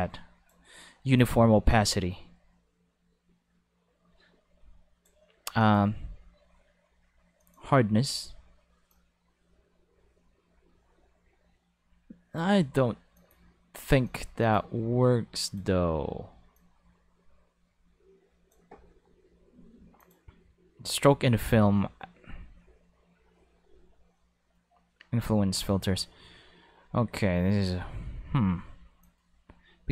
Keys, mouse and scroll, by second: 1.0 click, 1.9-5.0 drag, 5.6 click, 7.4 click, 8.9-12.3 drag, 13.1 click, 13.9 5, 14.0 click, 14.4 click, 15.4 click, 16.5-18.5 drag, 20.0 click, 20.9 click, 29.0-29.9 drag.